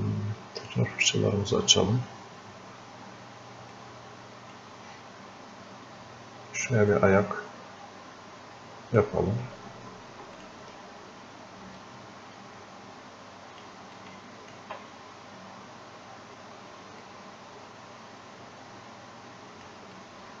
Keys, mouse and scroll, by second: 3.8-6.9 drag, 6.9-17.0 drag, 17.0-20.4 drag.